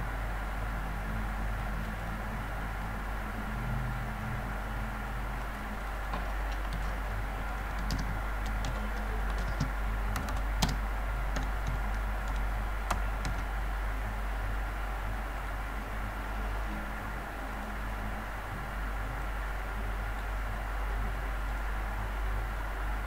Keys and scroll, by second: 6.7 ctrl+a.